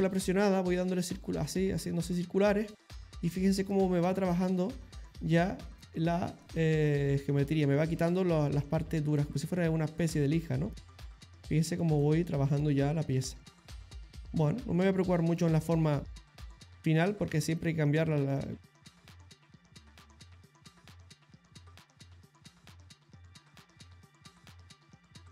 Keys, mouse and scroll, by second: 3.0 middle click, 3.7 shift+click, 5.8 middle click, 6.4 shift+click, 9.1 shift+middle click, 10.1 middle click, 10.8 shift+click, 12.0 middle click, 12.6 middle click, 13.2 shift+click, 13.7 shift+middle click, 15.1 middle click, 16.0 shift+click, 18.6 middle click, 19.0 middle click, 19.5 middle click, 20.7 shift+click, 21.6 middle click, 22.7 middle click, 23.5 shift+click.